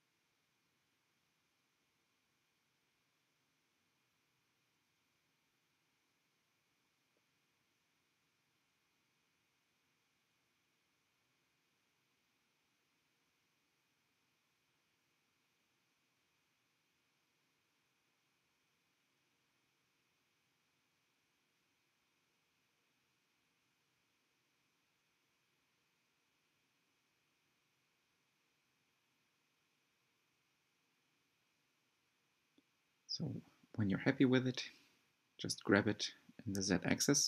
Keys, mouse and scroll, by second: 0.5 shift+click, 1.2 shift+click, 2.2 click, 2.9 g, 5.9 e, 8.2 s, 9.4-10.9 middle drag, 11.1 middle click, 11.7 click, 12.3 scroll up 2, 12.9 middle click, 13.5 click, 14.3 g, 15.8 click, 16.0 g, 17.8 click, 20.9 click, 22.6 1, 23.2 alt+z, 24.1 click, 24.4 g, 26.5 click, 26.9 g, 28.5-29.9 middle drag, 29.9-30.9 scroll down 2, 30.9 click, 32.0 click, 32.9 Tab, 33.5 g, 36.0 scroll down 2, 36.3-36.8 shift+middle drag, 36.8 Tab.